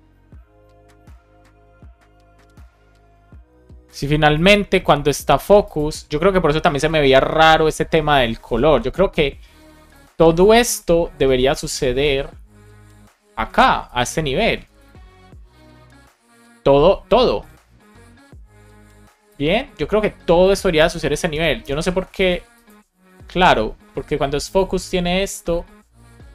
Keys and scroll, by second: 13.3 super+x, 14.5 Return, 14.7 super+v, 21.0 BackSpace, 22.1 super+s.